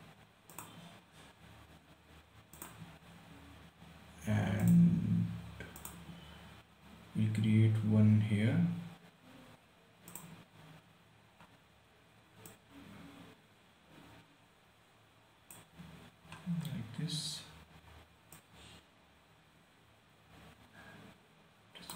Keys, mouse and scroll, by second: 0.8 click, 3.4 scroll down 1, 5.0 click, 10.4 click, 12.8-16.7 drag, 16.7 scroll up 1, 18.7-21.9 drag.